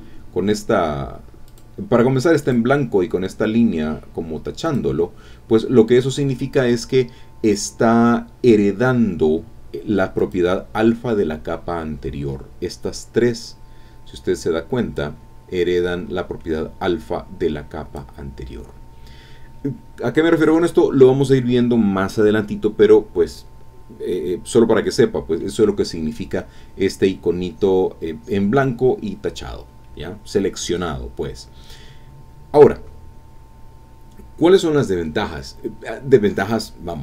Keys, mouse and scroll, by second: 1.5 click, 2.4 click, 4.6 click, 10.2 click, 12.5-12.8 scroll up 2, 12.8 scroll down 2, 13.9 scroll up 2, 14.9-18.1 drag, 34.0 scroll up 2, 34.3 scroll down 2.